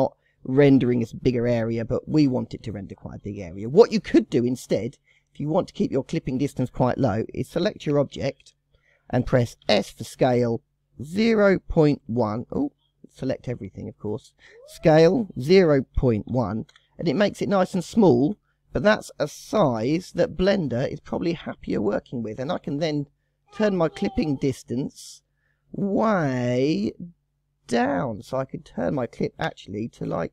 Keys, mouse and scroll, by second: 1.6-2.1 scroll up 6, 2.5-3.2 scroll down 1, 3.8 click, 4.6 click, 5.8 click, 7.9 KP_0, 8.2 KP_1, 9.6 s, 13.9 click, 15.0 s, 17.3-17.7 scroll up 9, 17.9-18.4 shift+middle drag, 18.4-19.6 scroll up 3, 19.6 KP_0, 20.2-20.8 scroll up 9, 20.8-21.6 shift+middle drag, 21.6-22.1 scroll up 2, 22.1 shift+middle drag, 22.3-22.8 shift+scroll up 2, 23.6 click, 28.8-30.3 drag.